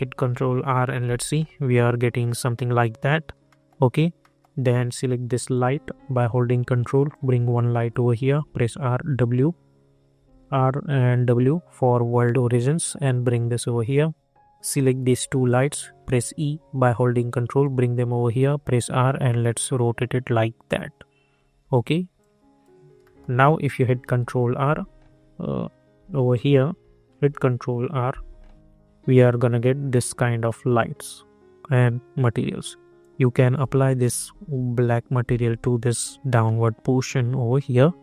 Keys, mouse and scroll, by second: 0.2 ctrl+r, 3.4 middle click, 5.5 click, 7.1 ctrl+click, 8.3-11.0 typing, 11.7-14.8 drag, 16.0 e, 16.8-18.2 ctrl+drag, 18.2 r, 18.9-21.4 drag, 21.4 e, 22.1 click, 23.0 middle click, 24.0 ctrl+t, 26.3 click, 26.3 click, 27.2 ctrl+r, 33.0-34.5 drag, 34.5 ctrl+r.